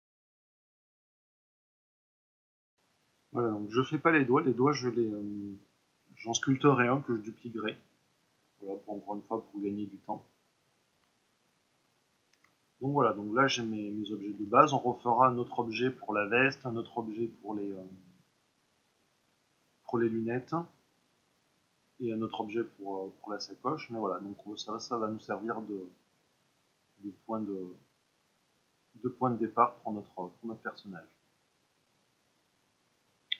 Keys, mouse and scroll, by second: 0.2 a, 0.5 click, 0.6 ctrl+r, 0.7 click, 1.3 middle click, 1.4 click, 1.7 e, 1.9 click, 1.9 middle click, 2.3 Tab, 2.7-21.2 middle drag, 25.1-29.8 middle drag.